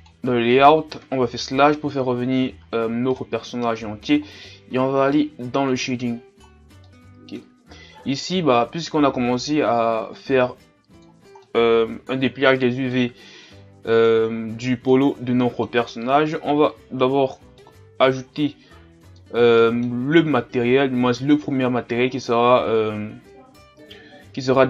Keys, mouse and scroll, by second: 0.1-1.5 drag, 1.5 KP_Divide, 2.6-2.9 scroll up 3, 3.1-4.2 middle drag, 4.2-5.8 scroll up 4, 5.8-6.9 drag, 6.9 middle click, 7.8-8.6 scroll down 4, 10.4-11.4 drag, 11.4-16.1 middle drag, 16.1-17.6 scroll down 1, 17.6-18.6 middle drag, 18.6-19.2 scroll up 3, 19.2-20.5 middle drag, 20.5-21.4 scroll down 1, 21.4-23.0 scroll down 1, 23.0-24.3 scroll down 1, 24.3-24.6 scroll down 1.